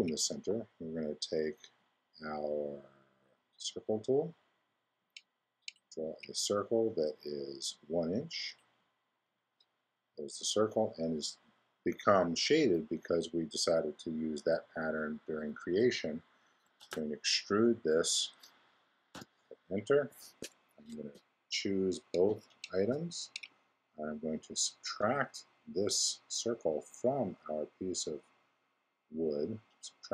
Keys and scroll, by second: 16.8 super+e, 19.1 Return, 20.9 x.